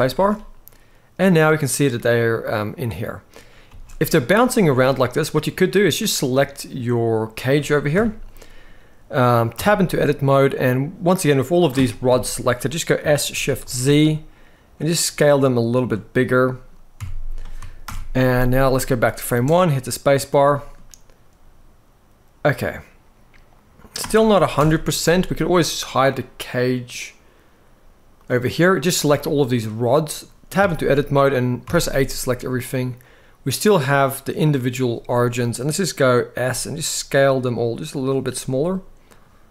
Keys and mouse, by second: 2.4-3.0 middle drag, 3.5 space, 4.4-5.2 middle drag, 5.8-6.1 drag, 6.1-7.2 middle drag, 7.6 KP_7, 9.3 Tab, 10.8 middle click, 11.8 KP_7, 12.7 s, 13.3 shift+z, 16.7 Tab, 17.5 shift+Left, 19.0 space, 20.1-20.6 middle drag, 23.7 space, 24.3 shift+Left, 27.9 click, 28.7-29.3 drag, 29.6 middle drag, 30.3 Tab, 31.4 a, 33.4-34.5 drag, 34.9 middle click, 36.2 s, 38.4-38.9 drag.